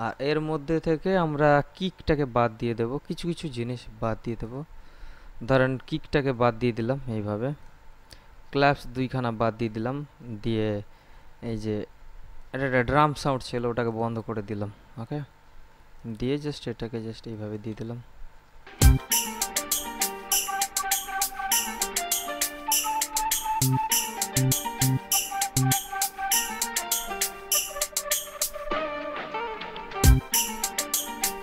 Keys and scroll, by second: 19.0 space.